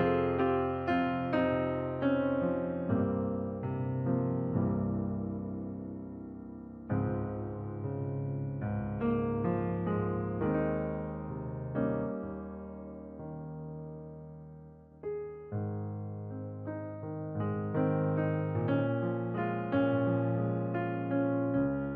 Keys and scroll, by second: 18.0 ctrl+t.